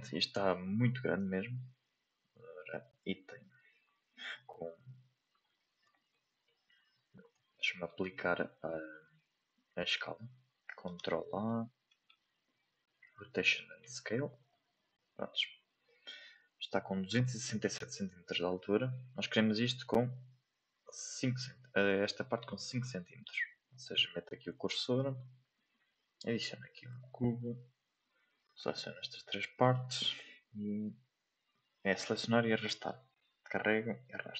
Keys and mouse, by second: 1.5 n, 6.0-6.4 shift+middle drag, 7.5 shift+middle click, 15.9 shift+middle click, 18.7 shift+middle drag, 23.9-24.4 drag, 24.6 shift+middle click, 28.5-34.3 drag.